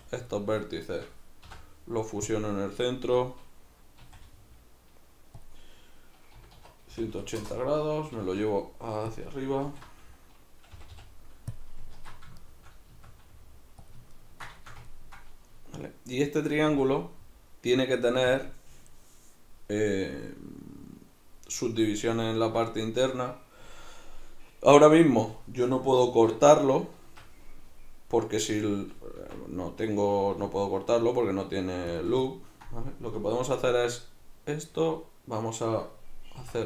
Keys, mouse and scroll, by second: 0.3 right drag, 0.9 shift+right click, 1.5 m, 5.5 click, 6.3 r, 9.2 click, 9.7 alt+q, 10.7 g, 11.6 click, 12.0 alt+q, 12.4-13.9 shift+middle drag, 12.9 s, 13.9 click, 14.1-18.4 ctrl+middle drag, 16.7 s, 18.4 click, 22.2-26.0 ctrl+middle drag, 26.0 ctrl+r, 32.0 shift+click, 32.3 ctrl+middle click.